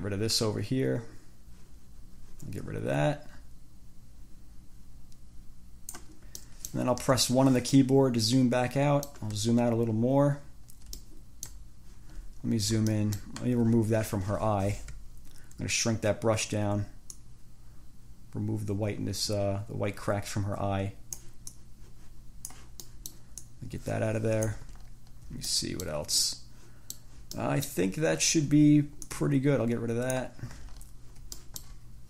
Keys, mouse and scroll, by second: 6.6 click, 7.3 1, 8.0-9.5 drag, 9.9-10.4 ctrl+scroll down 3, 10.9 ctrl+scroll up 2, 11.2 ctrl+click, 12.3 ctrl+scroll up 2, 14.6 [, 17.4-21.6 drag, 21.8-22.9 drag, 23.0 click, 23.6-24.9 drag, 25.0-25.5 ctrl+scroll down 2, 25.7 ctrl+click, 26.4 click, 27.6 click, 28.4 ctrl+scroll up 2, 29.2-30.6 drag, 31.0 ctrl+scroll down 2, 31.6 ctrl+middle click, 32.0 ctrl+scroll down 2.